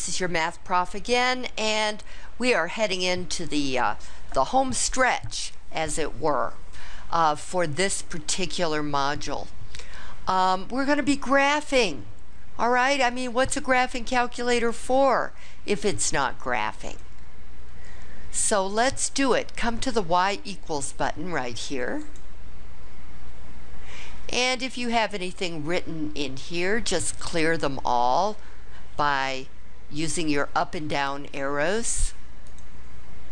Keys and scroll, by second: 32.0 Down, 32.4 Down.